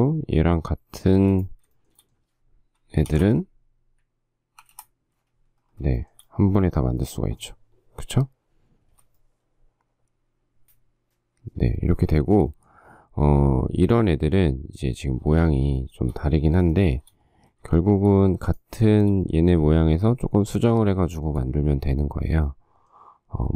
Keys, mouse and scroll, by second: 1.9 shift+middle click, 3.3 shift+8, 4.8 5, 4.9 Return, 6.2 shift+middle click, 9.0 space, 12.4 shift+middle click, 15.6 shift+middle click, 16.1 shift+double middle click, 16.9 shift+double middle click, 17.9 shift+middle click, 18.2 shift+middle click, 19.1 shift+middle click, 21.2 shift+middle click.